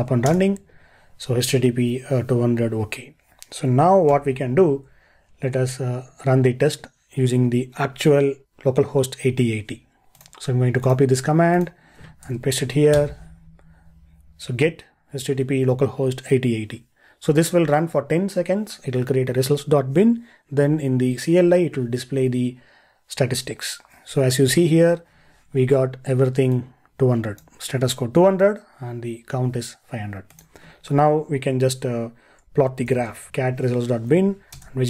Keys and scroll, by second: 4.1 ctrl+l, 12.3 super+v.